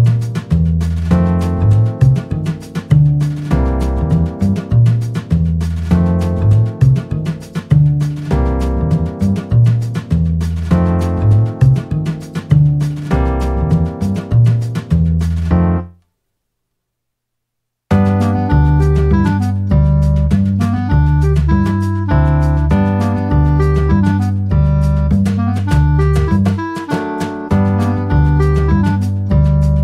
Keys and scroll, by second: 2.6 Return, 13.2 ctrl+v, 13.9 Return.